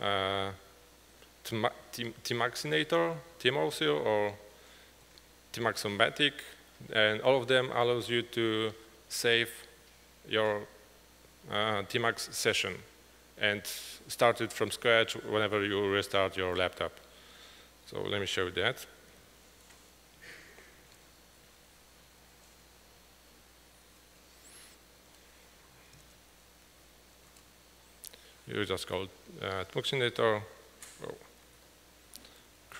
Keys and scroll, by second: 21.0-21.7 typing, 21.8 ctrl+=, 22.2 ctrl+=, 22.7 ctrl+=, 24.8-27.3 typing, 27.4 Tab, 30.4 Tab, 31.7 ctrl+l, 32.0-32.7 typing.